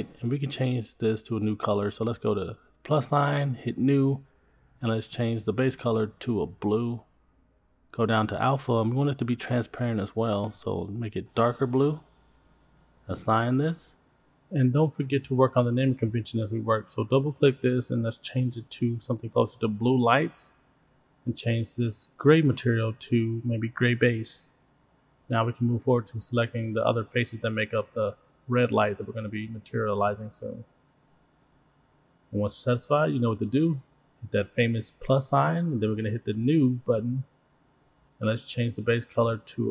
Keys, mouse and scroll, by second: 0.0 scroll down 4, 0.3-1.7 middle drag, 2.7 click, 4.2 click, 5.1 click, 7.2 scroll down 4, 7.4 scroll up 4, 7.4-9.2 drag, 9.3-10.0 scroll up 4, 9.9 click, 13.4-14.6 scroll up 1, 14.6 click, 14.6 scroll up 1, 16.3 click, 16.7 click, 17.3 click, 17.5-20.6 drag, 21.2 click, 21.3-27.2 drag, 28.3 middle click, 28.3 scroll up 2, 28.5 click, 29.1 middle click, 29.9 shift+click, 30.6 shift+click, 31.0 middle click, 31.9 shift+click, 32.5 middle click, 33.2-33.9 scroll down 1, 34.1-34.4 scroll down 1, 34.4 middle click, 36.6 click, 38.1 click, 39.1 click.